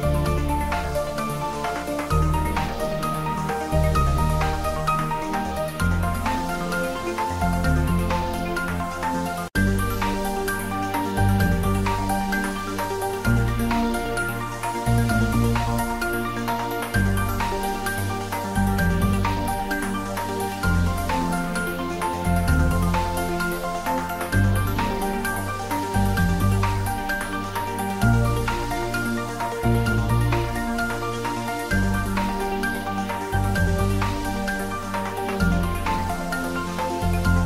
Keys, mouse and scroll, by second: 0.0-1.2 typing, 0.2 click, 3.4 click, 3.4-4.3 typing, 5.0 click, 5.2 shift+middle click, 5.9-7.9 typing, 6.8 click, 9.5-10.4 typing, 9.5 click, 11.9 click, 12.5 s, 13.2 click, 13.7 `, 14.0 3, 14.7 ctrl+middle click, 15.4 click, 15.9 ctrl+middle click, 16.2 shift+middle click, 17.3 g, 18.6 click, 18.8 shift+middle click, 19.5 ctrl+middle click, 20.1 shift+middle click, 20.5 ctrl+middle click, 21.3 g, 21.7 click, 22.0 s, 23.8 click, 24.6 s, 25.5 click, 25.7 g, 27.1 y, 27.5 click, 27.8 r, 29.0 click, 29.4 g, 30.7 y, 31.3 click, 31.4 ctrl+s, 33.9 click, 34.0 s, 35.6 click, 35.9 g.